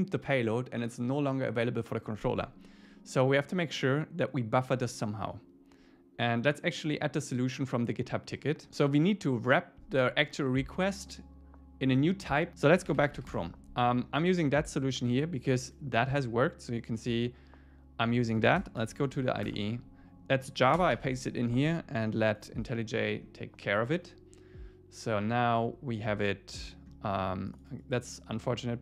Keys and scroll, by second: 13.3 Return, 19.5 Return, 20.8 Return, 21.0 super+v.